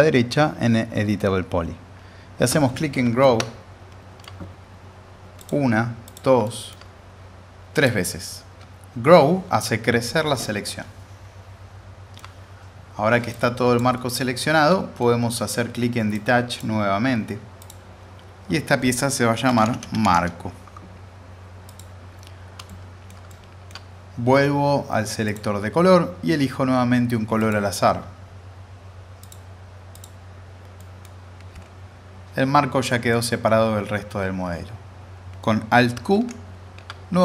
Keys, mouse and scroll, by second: 3.2-4.4 middle drag, 5.4 click, 6.4 alt+middle click, 7.7 click, 10.4-12.3 alt+middle drag, 13.3-13.9 click, 13.9-15.2 alt+middle drag, 16.1-16.7 drag, 19.2-20.5 typing, 21.7 click, 22.7-23.9 alt+space, 23.3-25.2 middle drag, 25.2 click, 30.8 middle click, 31.0-31.4 scroll down 1, 33.1-33.7 middle drag, 36.3 alt+q.